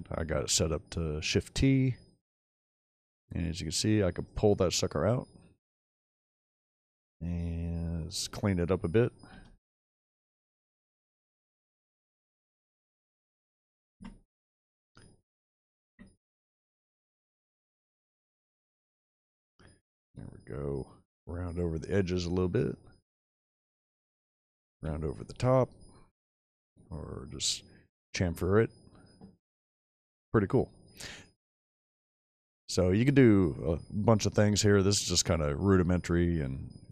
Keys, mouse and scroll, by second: 1.3 shift+click, 4.3 right drag, 4.8 middle drag, 10.5 ctrl+alt+shift+click, 13.9 Escape, 16.4 click, 24.7 ctrl+2, 31.9-32.7 middle drag, 34.9 shift+middle click, 35.8-36.6 scroll down 3, 36.6-36.9 shift+middle drag.